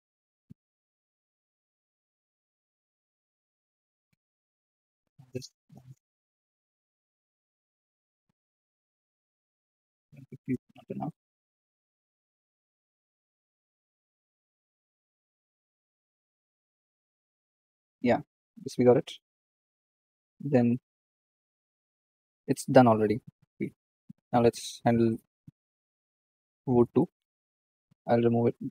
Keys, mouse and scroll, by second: 1.5 KP_0, 6.5-12.4 drag, 13.5 click, 13.9-16.2 drag, 16.6-18.1 scroll down 3, 18.1-19.5 scroll up 1, 21.9 click, 22.1 click, 22.3-23.4 scroll up 1, 23.4 shift+middle drag, 25.5-25.9 middle drag, 25.9 click, 26.5-28.7 middle drag.